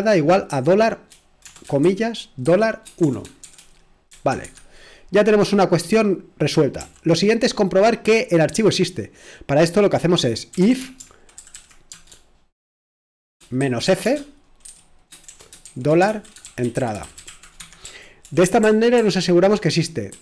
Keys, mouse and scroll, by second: 0.0-4.1 typing, 4.4 Escape, 6.8 typing, 10.3-11.9 typing, 13.3-20.2 typing.